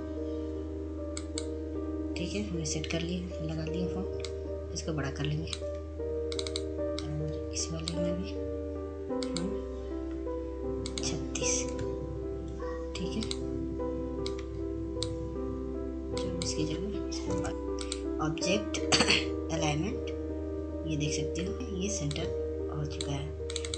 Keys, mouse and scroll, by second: 0.9 click, 4.7 click, 7.7-16.2 shift+drag, 16.9 click, 17.6 click, 20.8 shift+click, 21.5 ctrl+z, 22.3-23.7 drag.